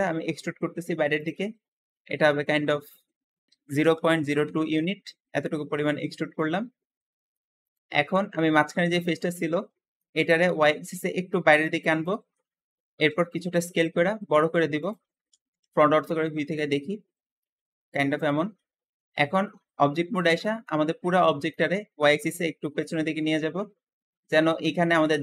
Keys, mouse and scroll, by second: 2.1-3.7 drag, 3.4-4.7 typing, 3.5 ctrl+a, 4.6 Return, 4.7 Return, 6.2-7.5 middle drag, 7.5 click, 7.9-10.7 middle drag, 10.7 click, 12.2 middle click, 12.7 s, 13.0 s, 15.3 KP_1, 17.3 middle click, 17.4 KP_1, 18.2 Tab, 18.4-22.1 middle drag, 22.1 click, 24.4 `.